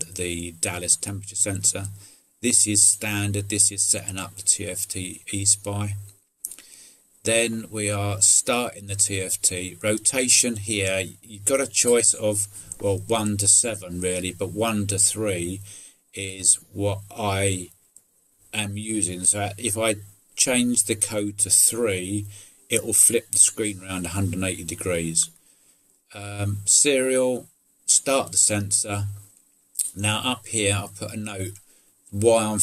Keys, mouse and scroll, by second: 0.8 middle click, 5.6 middle click, 6.2 middle click, 29.2 middle click.